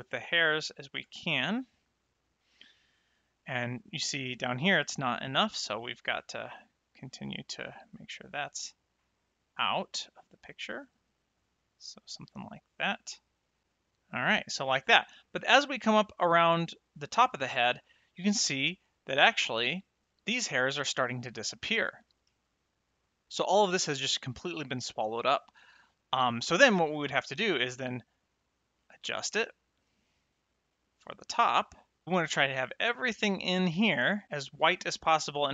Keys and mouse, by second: 1.2 middle click, 2.5 middle click, 5.8 click, 9.1 click, 13.6 middle click, 22.7 ctrl+shift+click, 25.5 ctrl+shift+click, 27.4 click, 30.7 click.